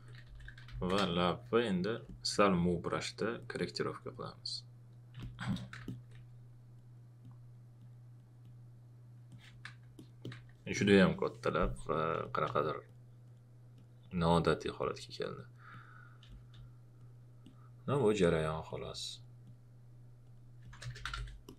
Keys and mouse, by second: 0.0-2.0 typing, 1.1 click, 2.0 click, 5.1 space, 5.5 click, 9.9 alt+click, 10.5 alt+click, 12.2 space, 20.6-21.5 typing, 21.4 click.